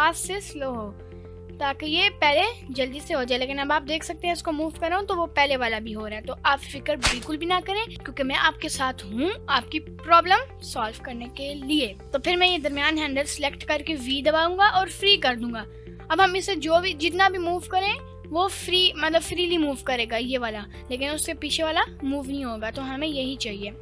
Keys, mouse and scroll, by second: 0.2 g, 2.4 ctrl+click, 3.1-3.8 scroll down 3, 3.8-4.4 scroll down 1, 4.4 scroll down 2, 4.4 g, 4.8 right click, 6.0 ctrl+z, 12.5 click, 14.1 v, 16.6 drag, 16.8 g, 18.0 right click, 19.2 scroll up 1, 19.6 g, 19.9 right click, 20.4 g, 20.8 right click, 21.5 scroll up 1, 22.1 scroll up 2, 22.7 g.